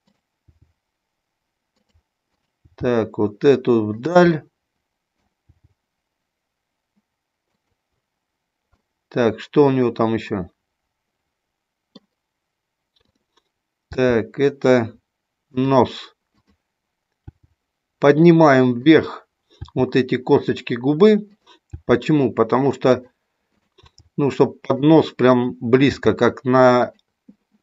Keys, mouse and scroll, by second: 0.2 click, 0.5 g, 1.8 click, 2.2 click, 2.8 g, 4.4 scroll up 1, 4.5 middle click, 5.4 g, 7.5 click, 8.7 scroll up 1, 8.9-11.9 middle drag, 12.9 click, 13.7 g, 15.5 click, 17.1 g, 19.5 g, 20.4 click, 21.3 click, 21.7 g, 23.0 click, 23.5 click, 24.0 g, 24.7 click, 25.8 g, 26.8 click.